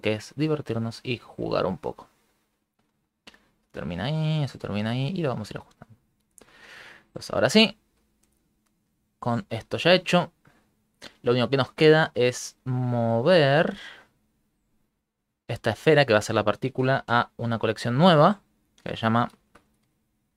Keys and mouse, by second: 0.5 click, 1.1 click, 1.6 click, 3.7 click, 4.2 click, 4.5 click, 5.3 click, 6.4 middle click, 7.1 middle click, 7.7 ctrl+middle click, 7.8 ctrl+middle click, 8.1 middle click, 8.6 ctrl+middle click, 9.6 ctrl+middle click, 9.7 middle click, 10.4 shift+middle click, 10.4 shift+middle click, 12.1 middle click, 14.4 click, 16.0 right click, 17.1 m.